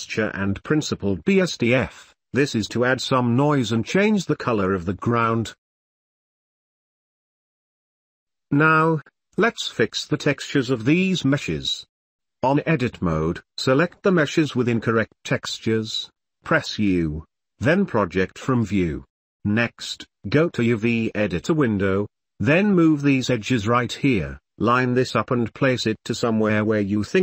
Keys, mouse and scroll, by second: 0.2-2.0 drag, 0.9 shift+a, 2.9 g, 3.5 g, 3.6 ctrl+s, 3.6 click, 4.4 click, 4.7 ctrl+s, 4.8 middle click, 4.8 ctrl+s, 4.9 shift+click, 5.0 middle click, 5.2 n, 5.5 middle click, 5.9 ctrl+s, 6.5 ctrl+s, 7.1 ctrl+s, 7.5 ctrl+s, 7.9 ctrl+s, 8.4-9.0 shift+middle drag, 9.6 Tab, 10.2 middle click, 11.1 middle click, 12.2 shift+middle click, 13.5 middle click, 14.6 3, 15.1 middle click, 16.1 ctrl+click, 17.1 u, 18.8 middle click, 19.6 s, 20.7 g, 22.2 s, 23.4 shift+click, 24.0 r, 24.9 g, 26.0 r.